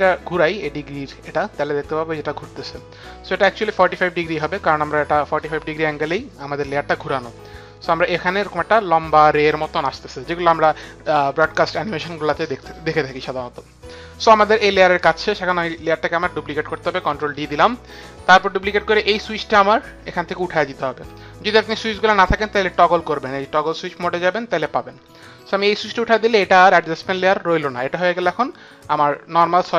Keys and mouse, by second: 15.7 click, 17.2 ctrl+d, 20.2 click, 23.7 click.